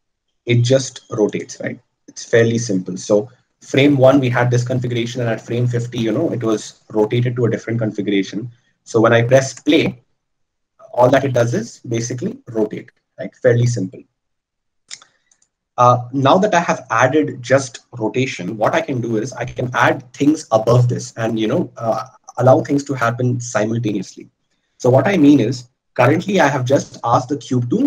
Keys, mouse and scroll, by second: 1.7-6.6 right drag.